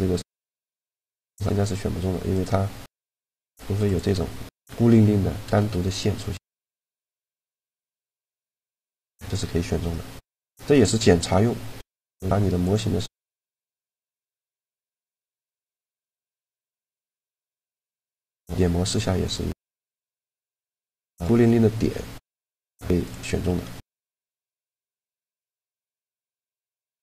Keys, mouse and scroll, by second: 1.0-2.1 middle drag, 2.1-3.8 right drag, 3.0 shift+d, 5.3 shift+d, 6.4 a, 8.3 click, 9.1-10.3 middle drag, 10.3 x, 14.3-16.7 middle drag, 17.1-19.8 drag, 19.3-21.1 right drag, 19.9 shift+d, 20.6 a, 21.7 middle click, 23.7 click, 23.7 a, 24.6 g, 25.5 x.